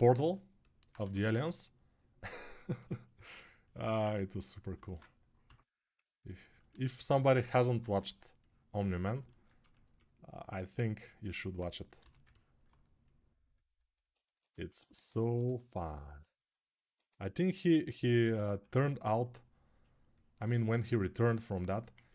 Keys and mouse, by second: 0.8 1, 5.2 6, 6.3-13.9 shift+right drag, 7.4 1, 11.8 g, 14.8 1, 17.7-21.7 ctrl+alt+right drag, 18.4 2, 21.7-22.1 ctrl+alt+drag.